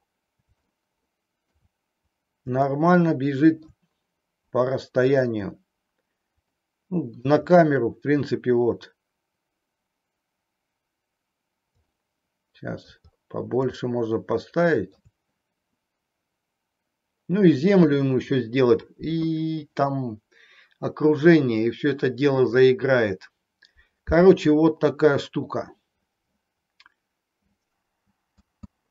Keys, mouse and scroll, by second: 0.7-1.6 middle drag, 2.7-3.8 middle drag, 6.6-7.3 middle drag, 12.1-13.0 middle drag, 13.8-15.1 middle drag, 28.6 space.